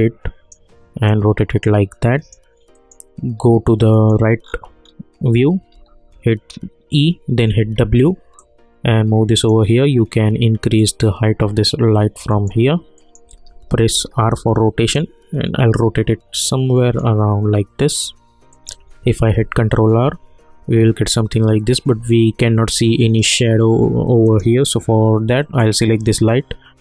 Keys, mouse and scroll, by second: 2.7 middle click, 4.4 scroll down 1, 5.7 e, 7.6 w, 8.4-12.3 drag, 12.3 middle click, 13.4 middle click, 13.5 e, 13.9 r, 14.9-16.8 drag, 16.8 middle click, 19.1 ctrl+r, 24.2 click.